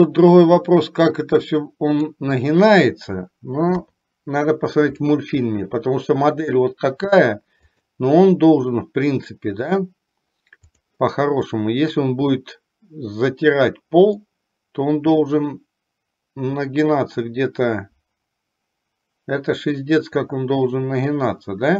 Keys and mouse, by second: 3.7 KP_3, 5.1-5.6 shift+middle drag, 9.9 click, 14.4-21.7 drag.